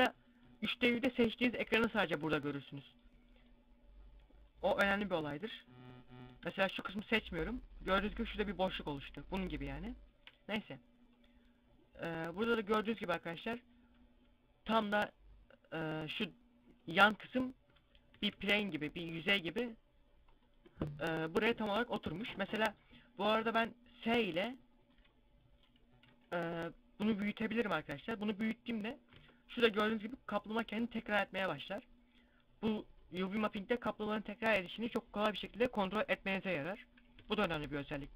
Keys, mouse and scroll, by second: 4.5-18.1 drag, 18.1 s, 21.2-23.4 right drag, 23.4 s, 26.8 s, 29.0 Tab, 29.0-30.3 drag, 33.3 Tab, 37.0 s.